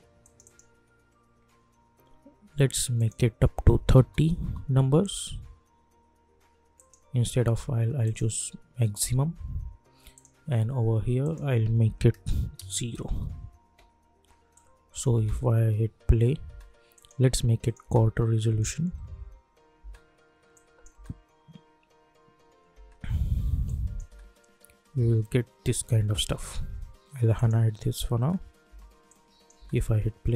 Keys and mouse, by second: 0.2 click, 2.9 click, 4.3 Return, 6.7 click, 13.0 Return, 14.5 click, 15.1 space, 16.9 click, 17.8 space, 19.7 space, 20.5 click, 20.9 space, 23.6 click, 24.0 space, 27.3 click, 28.2 space, 29.0 click, 29.5 space.